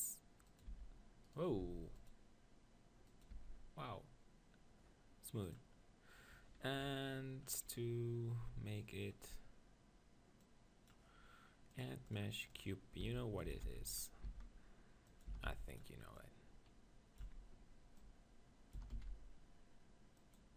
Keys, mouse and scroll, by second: 0.6-2.4 drag, 0.7 r, 1.4-3.3 right drag, 1.7 ctrl+r, 3.2-5.0 drag, 3.5 Tab, 5.4-7.5 drag, 6.8 KP_1, 7.5 middle click, 10.4-13.6 drag, 13.0 s, 13.4 s, 14.0-20.2 drag, 14.2 s, 15.3 s, 17.2 z.